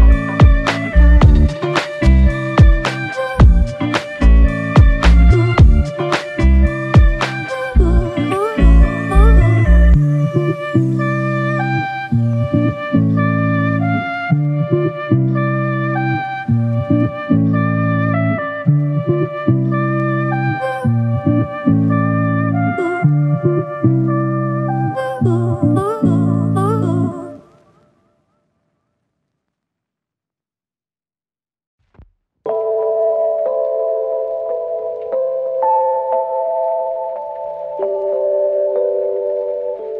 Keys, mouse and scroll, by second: 7.3 space, 12.7 alt+click, 14.4 alt+click, 17.5 double click, 26.6 alt+click, 30.6 double click, 34.5 alt+click.